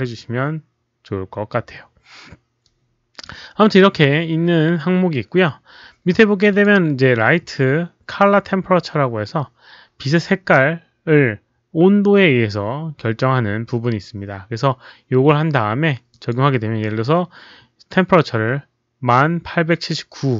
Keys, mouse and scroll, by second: 1.1 middle click, 2.6 click, 6.6 click, 16.2 click.